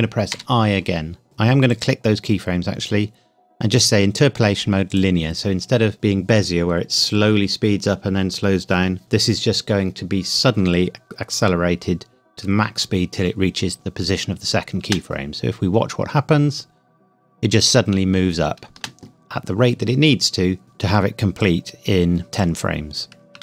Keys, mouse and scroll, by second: 0.3 i, 1.2 click, 1.7 right click, 4.9 click, 14.8 space, 18.7 space, 21.4 click.